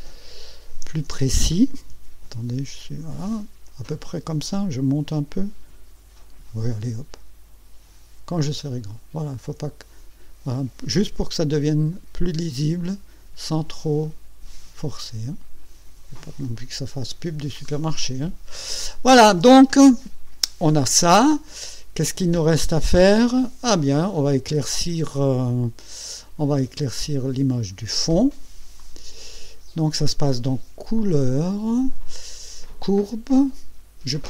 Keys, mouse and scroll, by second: 2.1 ctrl+scroll down 2, 4.9 Up, 5.9 Down, 7.2 Up, 9.0 ctrl+scroll down 2, 11.4 Down, 13.3 Up, 15.1 Up, 17.6-18.7 drag, 28.8 click, 31.0 click, 32.9 click.